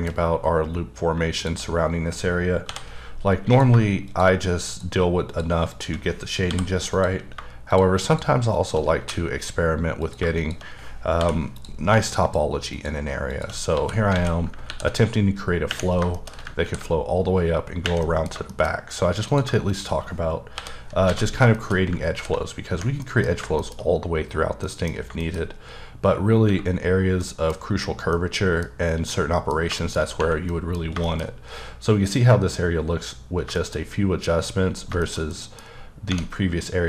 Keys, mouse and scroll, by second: 0.3-1.1 scroll down 1, 1.1 shift+scroll down 1, 1.4 shift+click, 1.8-2.7 scroll up 2, 2.7 j, 3.5 click, 4.7 shift+double click, 5.3 shift+click, 5.7 shift+click, 6.5 m, 6.9 click, 8.1 shift+double click, 8.5 shift+click, 9.0 f, 10.0 click, 11.2 m, 11.6 click, 12.7 shift+double click, 13.3 shift+click, 13.7 f, 14.2 alt+a, 14.7 ctrl+r, 15.8 scroll down 1, 16.1 shift+middle click, 16.6 ctrl+r, 18.0 middle click, 18.7-19.3 scroll up 3, 19.3 click, 20.6 j, 20.9 scroll down 2, 21.1 alt+a, 21.6 shift+middle click, 22.2 ctrl+r, 23.0 middle click, 23.3-23.6 scroll down 1, 23.6 shift+middle click, 25.4-26.5 scroll up 2, 27.2 middle click, 28.1 middle click, 29.1 middle click, 30.5 middle click, 31.3-33.4 scroll up 1, 33.5 shift+middle click, 33.8-34.3 scroll up 1, 34.7 scroll down 2, 35.0 shift+middle click.